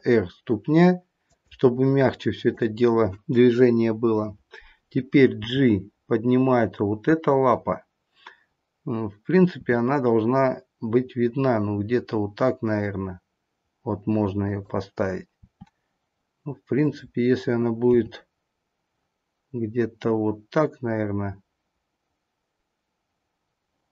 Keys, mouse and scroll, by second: 2.4 click, 5.2 g, 9.5 r, 15.4 r, 17.8 g.